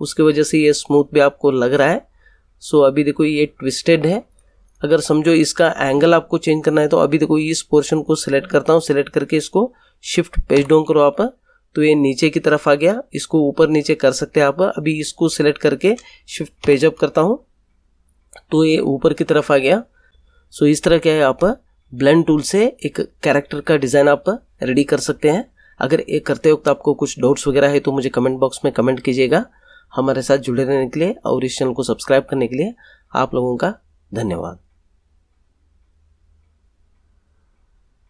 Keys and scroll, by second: 10.5 shift+Page_Down, 16.5 shift+Page_Up.